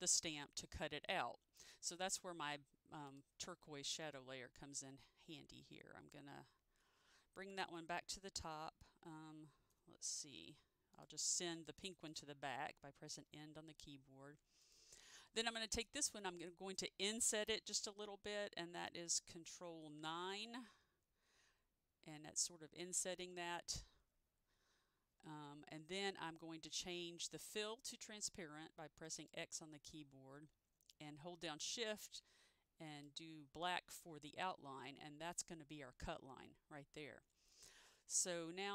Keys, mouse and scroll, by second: 3.2 click, 8.5 click, 10.1 Home, 11.0 click, 13.1 End, 14.7 click, 20.3 ctrl+9, 29.2 click, 33.0 click, 37.6 click.